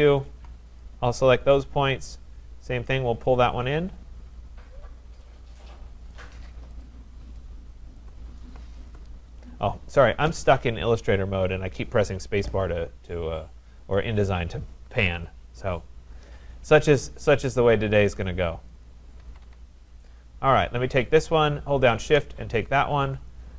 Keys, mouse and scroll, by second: 0.2 shift+click, 1.1 click, 6.1 click, 6.8 click, 7.2-7.7 scroll, 7.7-8.0 scroll, 8.0 click, 10.7-11.5 scroll, 12.7 scroll, 13.9 click, 17.2 click, 18.0 click, 18.8 click, 19.2 Escape, 19.4 Escape, 20.6 click, 22.0 shift+click, 23.3 click.